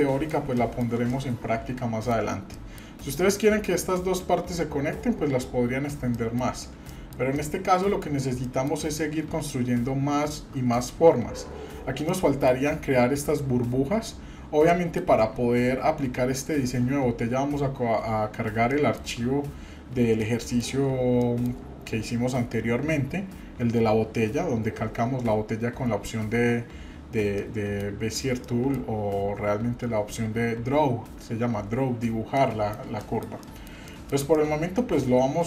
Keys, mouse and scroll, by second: 0.4 scroll down 1, 0.6 shift+middle click, 1.1-2.1 middle drag, 2.5-3.6 shift+middle drag, 5.9 scroll up 1, 6.1 middle click, 6.6 scroll up 1, 6.9-7.3 shift+middle drag, 7.4-8.0 middle drag, 8.4 middle click, 8.8-9.9 scroll down 4, 12.1-12.5 middle drag, 14.7 shift+middle click, 18.0 scroll down 1, 18.7 shift+middle click, 20.2 middle click, 21.2 shift+middle click, 27.4 middle click, 28.4 middle click, 32.4 middle click, 33.0-33.3 shift+middle drag, 33.4 middle click, 33.8 shift+middle click, 34.3-35.4 middle drag.